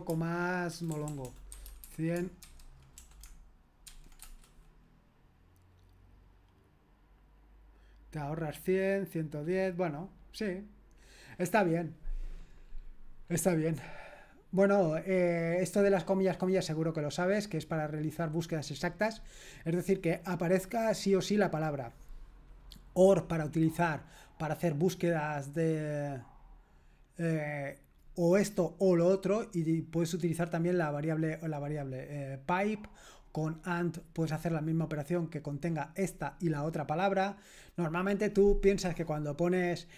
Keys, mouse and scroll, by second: 0.7-3.9 typing, 4.2 Return, 14.0-14.9 scroll down 1, 14.9-39.9 drag.